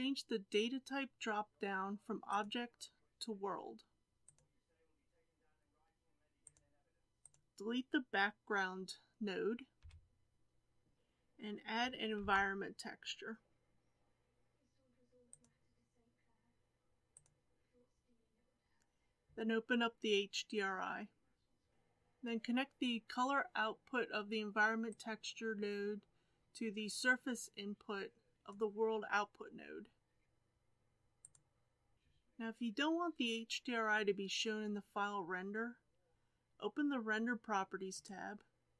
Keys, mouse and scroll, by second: 7.2 click, 9.8 x, 30.2 scroll down 5, 31.3 click, 31.9-35.7 scroll up 5.